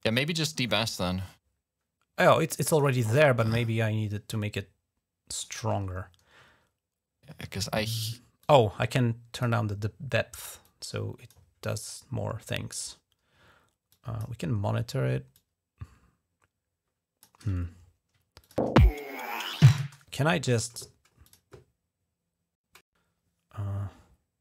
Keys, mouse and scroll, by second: 2.5 click, 4.1-5.3 drag, 8.2-9.3 drag, 10.4 click, 13.7 click, 15.1-17.1 drag, 17.4 ctrl+scroll down 1, 18.2 ctrl+click, 18.3 space, 18.6-19.0 ctrl+scroll up 1, 19.1-19.6 ctrl+scroll down 1, 19.6 space, 21.1 click, 24.3 click.